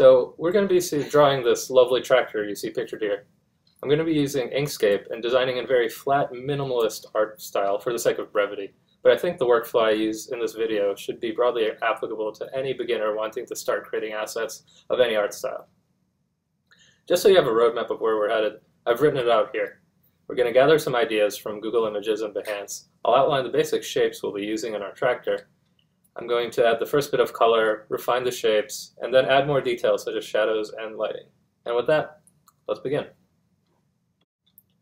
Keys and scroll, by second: 0.0-2.3 typing, 5.1-8.3 typing, 16.5-22.8 typing, 24.1-30.4 typing.